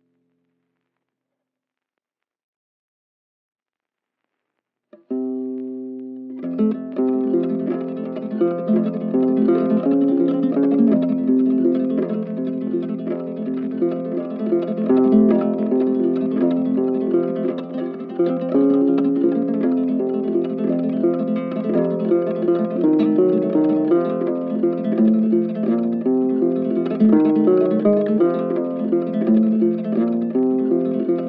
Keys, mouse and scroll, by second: 2.8 ctrl+click, 3.4 shift+click, 4.0 shift+click, 5.5 shift+click, 5.9 shift+click, 6.7 shift+click, 7.7 shift+click, 9.1 ctrl+shift+click, 10.0 shift+click, 10.9 right click, 15.0 right click, 24.4 shift+click.